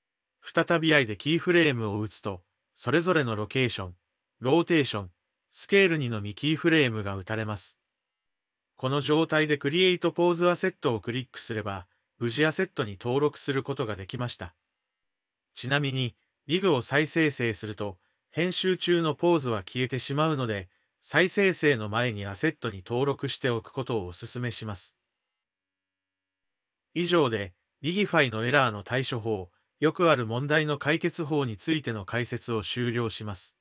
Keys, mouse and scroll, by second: 1.9 i, 11.8 click, 16.5 Tab, 18.2 click, 20.7-22.4 drag, 23.3-25.2 shift+drag, 27.3 Tab, 28.5 click, 29.5 shift+drag, 30.1-31.3 middle drag, 32.8 Tab.